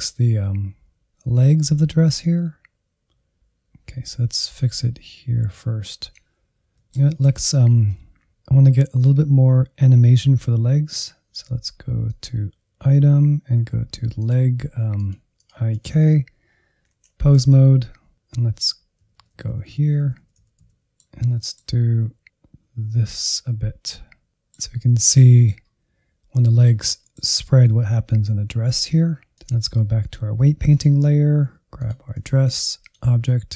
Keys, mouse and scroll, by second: 6.2 scroll down 2, 6.3 shift+middle click, 7.2-10.5 drag, 10.9-12.8 drag, 12.8-14.0 scroll down 4, 14.2 click, 15.0 click, 17.2 click, 18.5 click, 18.7 Up, 19.4-20.1 Right, 20.5 click, 20.7 middle click, 21.5 g, 22.5 middle click, 23.3 g, 23.7 middle click, 24.1 scroll up 1, 24.3 shift+middle click, 24.7 scroll up 2, 24.8-28.7 middle drag, 28.7 ctrl+Tab, 28.9-33.5 drag.